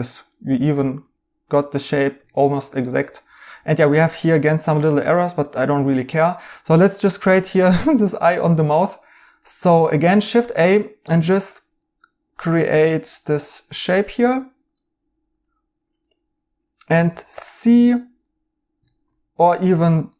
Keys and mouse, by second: 0.7 right click, 2.2 right click, 4.6 right click, 7.9 a, 9.7 Escape, 17.0 c, 17.3 right click, 18.8 right click, 19.1 Escape.